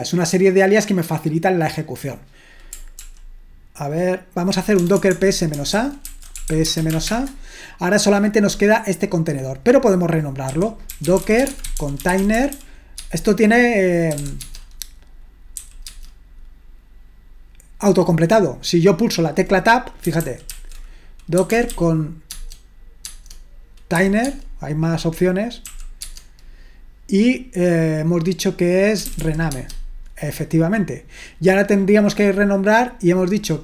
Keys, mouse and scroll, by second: 3.0 ctrl+p, 4.8-7.4 typing, 5.7 ctrl+w, 6.1 ctrl+w, 9.3-10.9 drag, 10.3-16.0 typing, 20.2 ctrl+w, 20.5 ctrl+w, 21.1-22.2 typing, 22.3 Tab, 23.0 Tab, 24.0 t, 24.3 Tab, 26.0 Tab, 28.8-29.7 typing.